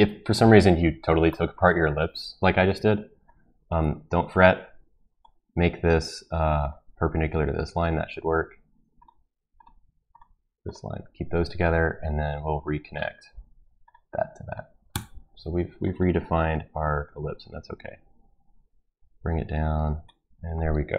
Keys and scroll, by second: 14.9 Escape.